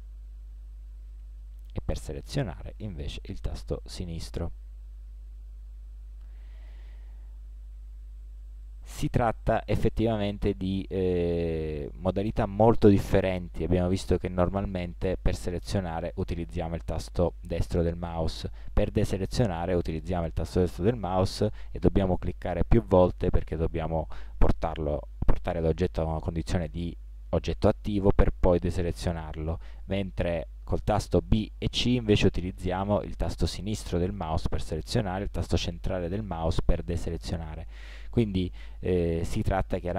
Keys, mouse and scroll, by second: 17.4-23.8 right drag, 23.7 click, 23.9 middle click, 32.8 b, 35.8 b.